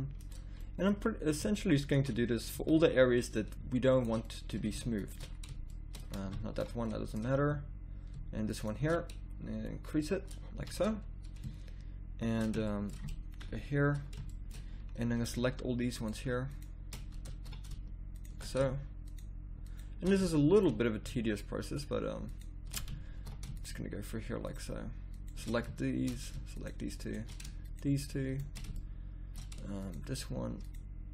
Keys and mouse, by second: 0.9 z, 1.8 middle click, 2.5 z, 5.9 click, 6.4 ctrl+z, 10.5 a, 12.2 middle click, 13.4 KP_1, 15.9 click, 17.3 ctrl+z, 20.2-21.7 drag, 23.1 ctrl+z, 25.8-27.6 middle drag, 28.8-30.6 middle drag.